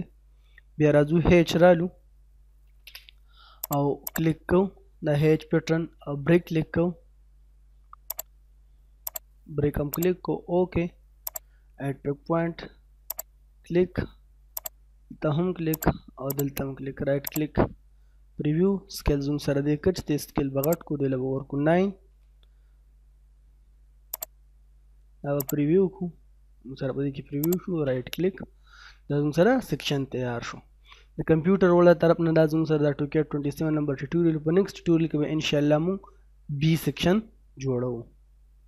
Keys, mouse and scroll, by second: 2.3 h, 2.5 space, 3.6 click, 7.1-8.1 scroll up 1, 8.1 click, 16.3 right click, 17.3 click, 17.9 scroll up 1, 20.6 click, 21.7 9, 24.1-25.4 drag, 26.1 middle click, 27.4 right click, 28.0-29.4 middle drag, 29.4-29.8 scroll down 1, 29.8 middle click, 30.4-30.7 scroll down 1, 30.7 middle click.